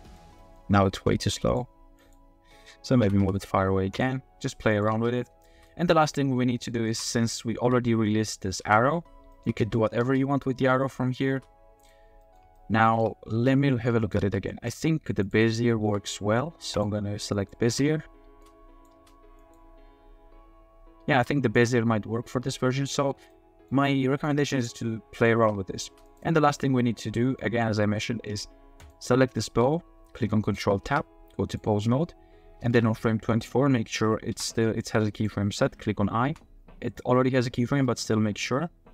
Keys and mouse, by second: 0.1 click, 0.4 click, 0.9 space, 1.5 click, 2.0 click, 3.0 g, 3.2 y, 4.7 click, 4.9 space, 5.5 space, 5.7 click, 6.6 shift+middle click, 7.6 f, 8.6 space, 9.3 shift+click, 9.6 space, 10.0 space, 11.3 space, 11.8 click, 12.2 click, 12.5-13.0 shift+drag, 13.3 space, 14.0 shift+click, 14.7 click, 15.2 click, 15.8 t, 17.4 click, 17.6 space, 18.3 space, 18.4-18.9 drag, 19.0 space, 19.4 click, 21.1 space, 21.6-22.9 drag, 23.3-23.7 middle drag, 24.3-25.3 middle drag, 25.3 space, 25.8 space, 26.1 middle click, 26.4 click, 26.5 middle click, 26.6 click, 27.4 click, 28.8 click, 29.5 g, 30.4 click, 30.9 ctrl+Tab, 34.3 g, 35.1-36.2 drag, 36.2 i, 37.8 middle click.